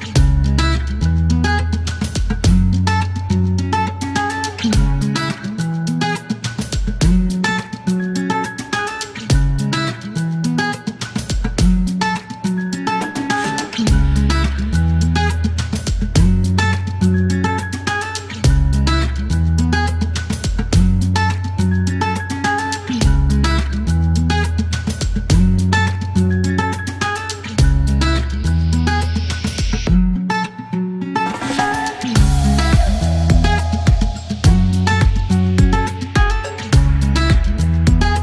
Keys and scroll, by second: 1.2 alt+e, 5.0-5.5 typing, 5.5 Return, 6.2 alt+c, 13.3 Escape, 15.0 ctrl+shift+u, 15.2 ctrl+shift+f, 15.5 Delete, 15.9 alt+e, 18.3 ctrl+shift+m, 18.3 ctrl+shift+n, 19.0 space, 19.3 KP_0, 21.9 F4, 22.3-23.4 typing, 25.5-30.3 typing, 32.4-34.2 typing, 35.3 typing.